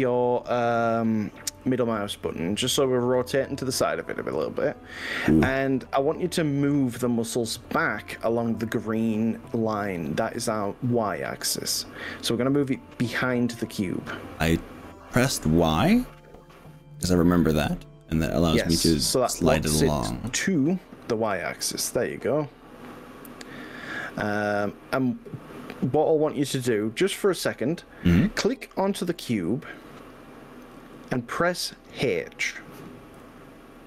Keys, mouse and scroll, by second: 1.8 click, 2.3-7.8 middle drag, 10.0 g, 12.6 y, 20.4 click, 21.3-29.2 middle drag, 29.8 click, 33.2 h.